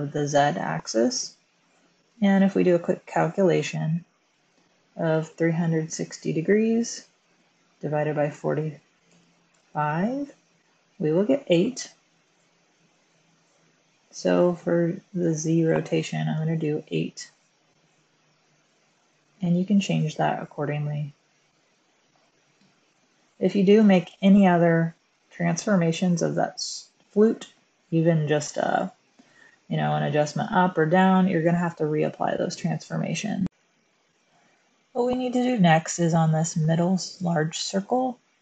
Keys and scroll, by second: 5.0-5.6 typing, 8.3-10.0 typing, 16.3 8, 16.7 Return.